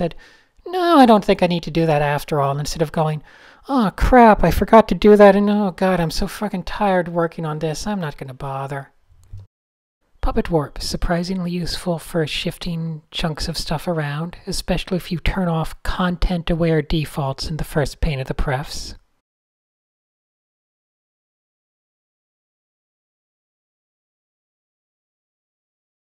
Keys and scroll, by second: 0.2 Tab, 0.9 super+space, 1.1 a, 2.4 super+h, 2.5 super+h, 2.6 Tab, 4.3 super+z, 4.6 shift+super+a, 4.6 super+1, 5.9 Tab, 6.2 super+s, 6.2 super+s, 6.6 super+h, 6.7 super+h, 7.0 super+a, 8.4 a, 9.0 shift+super+a, 9.8 super+space, 9.9 super+space, 10.0 super+space, 10.5 v, 10.8 shift+r, 11.8 super+z, 12.4 super+z, 13.9 shift+super+a, 14.2 v, 14.8 super+z, 15.6 Down, 15.6 Down, 15.7 Left, 15.8 Left, 15.9 Left, 16.0 Up, 16.0 Up, 16.2 Right, 16.3 Right, 16.5 Up, 16.8 Right, 17.4 v, 17.7 Right, 17.8 Right, 17.9 Up, 18.0 Up, 18.3 shift+super+a, 18.4 super+1, 19.3 Tab, 20.0-20.9 typing, 23.2-24.7 typing.